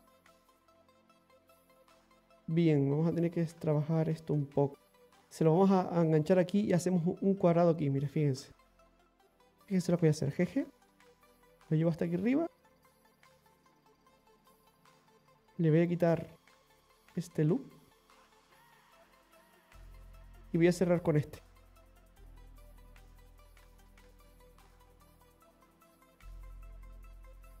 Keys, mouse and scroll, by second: 3.5 right click, 8.0-8.5 scroll up 3, 9.4 right click, 10.3 g, 12.0 right click, 12.2 g, 13.7 right click, 13.9 g, 14.8 middle click, 16.5 click, 17.4 alt+shift+right click, 17.6 alt+shift+right click, 18.3 right click, 18.7 alt+shift+right click, 19.0 alt+shift+right click, 20.1 middle click, 20.1 middle click, 21.1 scroll up 1, 22.4 click, 23.4 right click, 24.1 shift+right click, 24.9 right click, 25.4 shift+right click, 26.6 f, 27.3-27.6 scroll down 2.